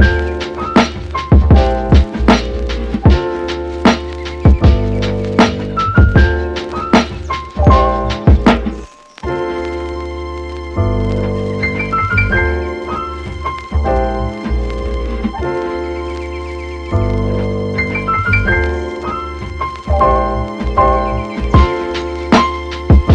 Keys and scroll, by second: 12.0 super+z, 13.9 super+z.